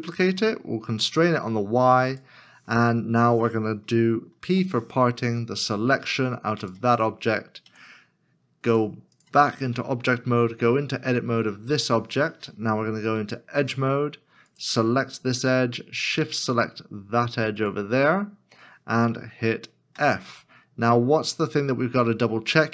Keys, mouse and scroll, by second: 0.3 y, 4.4 y, 4.5 p, 7.6 p, 8.5 Tab, 11.7 Tab, 13.4 2, 14.5 alt+click, 17.5 alt+shift+l, 17.7 alt+shift+click, 19.9 f.